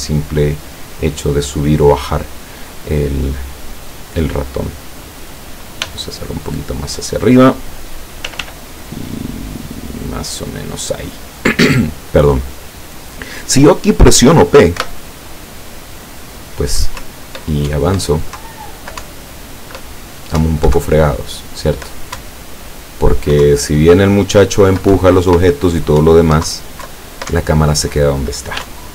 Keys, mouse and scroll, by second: 4.0 click, 5.9 g, 7.3 click, 8.3 r, 10.0 click, 14.8 p, 17.1 Up, 18.5 Down, 19.1 Up, 20.5 Up, 20.9 Down, 22.3 Up, 23.5 Down, 25.0 Up, 26.1 Up, 26.6 Down, 26.9 Left, 27.4 Right, 28.7 Up.